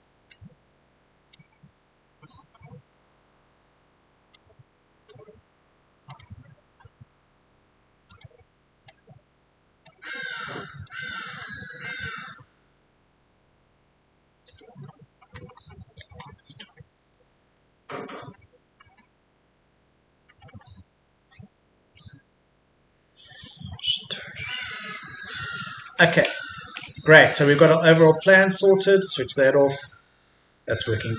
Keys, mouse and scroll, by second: 0.3 click, 2.3 middle click, 2.9-3.5 scroll down 1, 3.5-4.3 scroll up 1, 4.3-5.3 drag, 6.4 middle click, 8.1-11.7 drag, 11.7 middle click, 14.5 click, 14.9 middle click, 16.1-17.2 scroll up 1, 18.3-28.4 middle drag, 28.6 click.